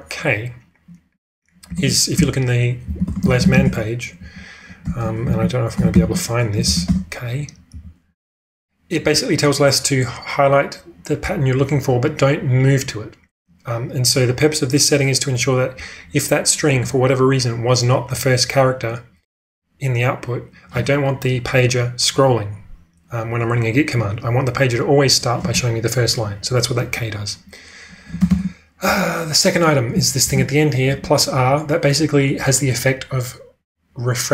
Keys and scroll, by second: 1.8 ctrl+space, 2.1-3.7 typing, 4.7-5.2 typing, 7.7 n, 28.2 ctrl+space, 30.2-31.3 typing.